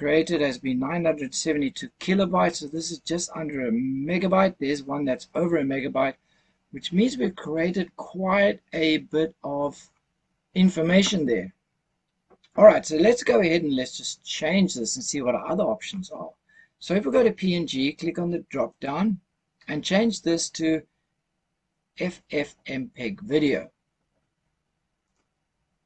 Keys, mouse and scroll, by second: 18.6-25.1 drag.